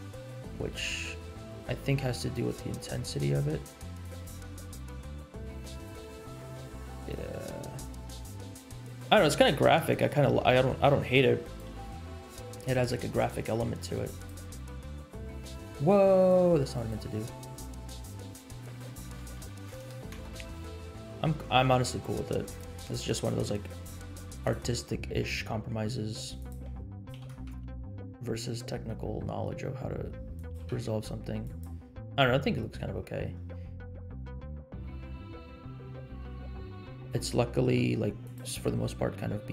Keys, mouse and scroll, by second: 1.5 click, 2.3-4.1 drag, 4.7-5.9 drag, 7.1-9.0 drag, 9.3 scroll down 2, 9.7 middle click, 10.2 r, 11.7 g, 13.4 middle click, 13.8 r, 14.9 click, 16.2 drag, 17.0 click, 18.4-20.4 drag, 19.8 KP_0, 21.2 middle click, 21.9 r, 22.6 g, 24.8 middle click, 25.2 r, 26.7 r, 27.1 g, 30.5 g, 32.3-32.7 scroll down 3, 32.9-33.6 scroll up 4, 33.8 scroll down 1, 34.2 shift+middle click, 34.5 scroll down 2, 35.1-36.3 middle drag, 36.6 scroll down 2, 36.9 click, 37.7 middle click, 38.2 click.